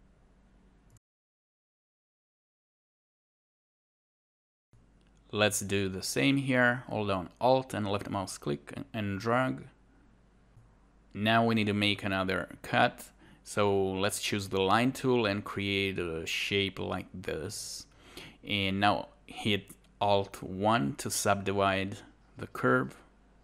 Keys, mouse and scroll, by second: 0.1 alt+right click, 0.4 alt+click, 1.1 alt+click, 3.2 alt+right click, 4.3 right click, 5.0 alt+click, 6.3 shift+click, 7.9 alt+click, 8.8 alt+right click, 9.8 shift+2, 10.1 scroll up 1.